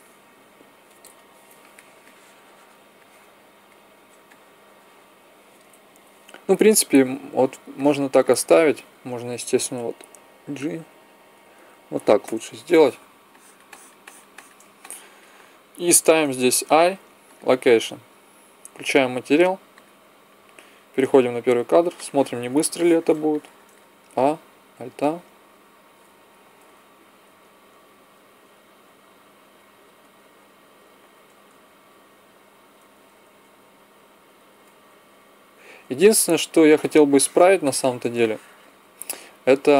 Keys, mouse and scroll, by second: 10.1 g, 16.6 i, 18.8-21.4 drag, 21.9-23.3 middle drag, 23.9 a, 24.7 alt+a, 26.6 Escape, 27.2 alt+a, 28.2 Escape, 28.8 alt+a, 29.7 Escape, 30.1 alt+a, 30.9 Escape, 31.5 alt+a, 32.7 Escape, 33.2 alt+a, 34.4 Escape, 34.9 alt+a, 35.6 Escape.